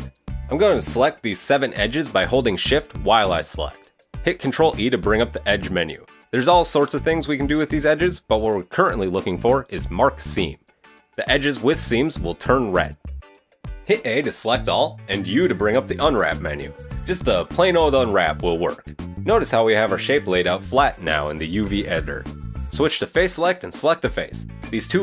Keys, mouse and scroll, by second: 0.8 right click, 1.1 shift+right click, 1.7 right click, 2.3 shift+right click, 2.4 shift+right click, 2.6 shift+right click, 2.8 shift+right click, 3.0 scroll down 3, 3.1 shift+middle click, 4.3 ctrl+e, 11.2 middle click, 13.7 a, 14.9 u, 22.6 click, 23.4 right click, 24.7 click.